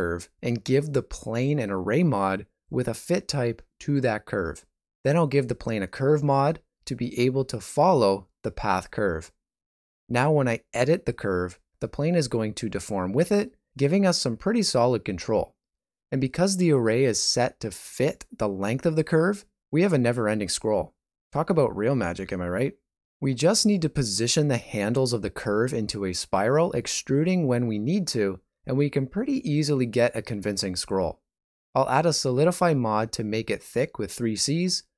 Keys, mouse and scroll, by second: 0.1 Tab, 1.0 right click, 2.1 click, 2.5 click, 3.4 click, 5.2 ctrl+middle click, 5.5 shift+middle click, 6.7 KP_1, 7.5 shift+middle click, 30.9 ctrl+space, 30.9 shift+middle click, 31.9 right click, 32.3 ctrl+middle click, 33.6 click, 34.8 shift+middle click.